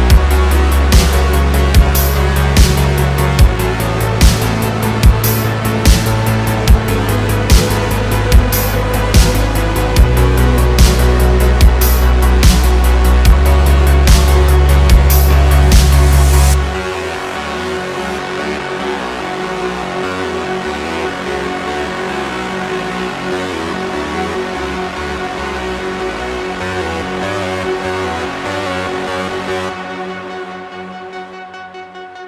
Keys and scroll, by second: 8.1 s, 8.3 y, 8.5 0, 9.3 Return, 10.3 s, 13.9 Tab, 14.7 shift+d, 15.8 s, 23.6-28.0 typing, 25.1 super+z.